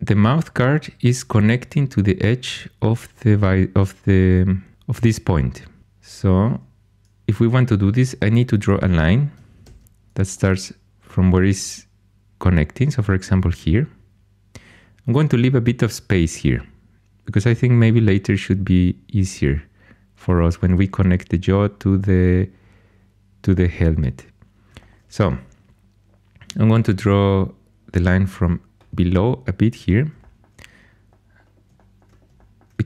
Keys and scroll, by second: 9.6 shift+a.